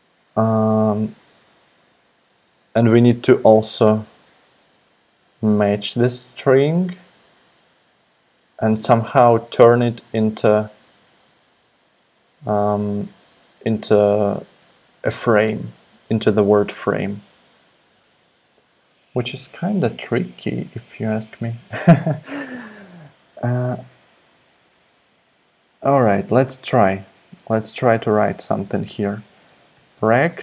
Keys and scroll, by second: 29.1-30.4 typing.